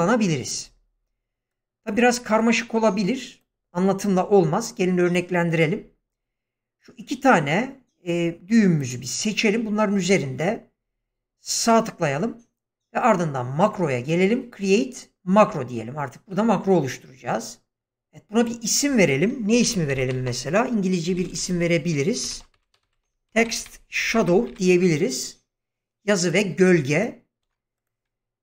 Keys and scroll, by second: 19.5 Caps_Lock, 19.6-21.1 typing, 22.2-24.5 typing, 22.3 Caps_Lock, 23.0 Caps_Lock, 27.4 BackSpace.